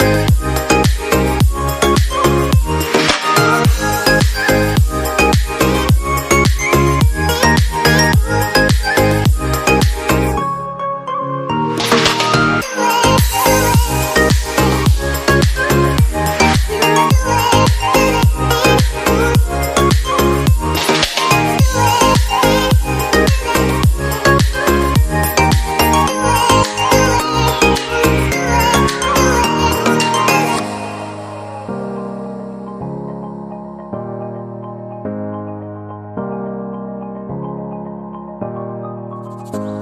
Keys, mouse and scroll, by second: 4.1 shift+Page_Up, 8.5 right click, 13.4 shift+click, 16.1 shift+Page_Up, 23.1 shift+Page_Down, 26.9 shift+Page_Down, 31.5 Delete, 32.7 F3.